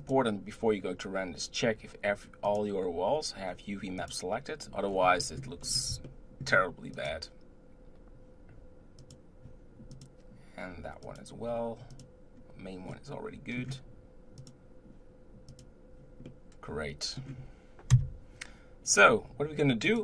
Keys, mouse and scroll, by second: 0.0 click, 2.5 click, 4.0 click, 4.9-5.2 scroll down 1, 5.2-5.6 middle drag, 5.6-6.0 scroll down 3, 6.0-6.9 shift+middle drag, 6.9 click, 9.1 click, 9.9 click, 11.2 click, 11.9 click, 12.9-14.4 middle drag, 14.4 click, 15.6 click, 16.4-17.9 middle drag, 17.9 KP_0, 18.9-19.8 scroll up 2, 19.8 click.